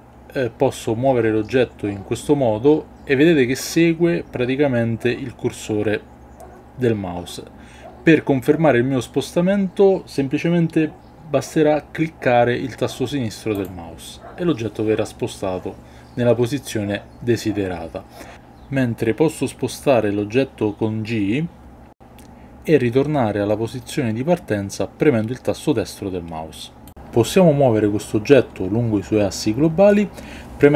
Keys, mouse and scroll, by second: 24.9 right click.